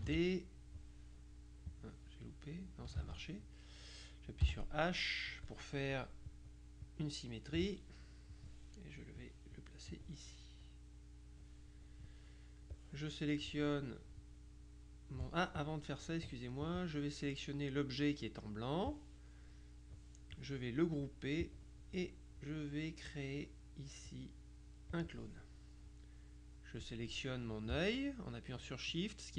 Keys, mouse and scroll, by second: 0.1 ctrl+d, 0.2 ctrl+f, 1.8 click, 2.5-3.3 drag, 3.0 ctrl+z, 4.5 h, 6.4 click, 8.4-9.8 drag, 10.0-11.9 drag, 12.8-14.0 drag, 15.7 click, 16.8 click, 21.5 click, 25.0 click.